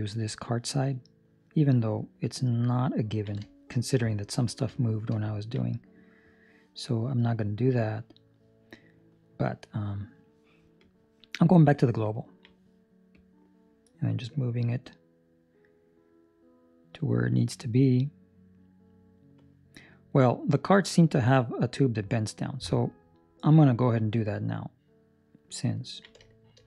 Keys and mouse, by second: 2.4 ctrl+middle click, 3.5 shift+middle click, 5.0 shift+middle click, 5.2 ctrl+middle click, 10.7 click, 12.1 ctrl+middle click, 13.1 click, 25.7 ctrl+middle click, 26.2 shift+middle click.